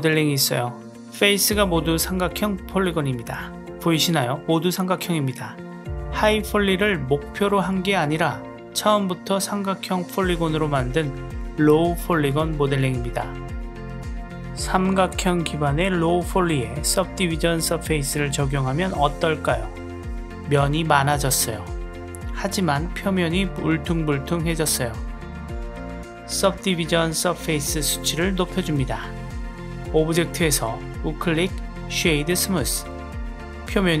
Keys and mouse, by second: 0.9-7.4 middle drag, 8.6 click, 9.3 click, 9.9 Tab, 10.7-11.9 middle drag, 17.6-19.9 drag, 20.2-22.5 middle drag, 23.7 click, 24.4 click, 25.7-27.3 drag, 30.1-32.1 right drag, 33.0-34.0 middle drag.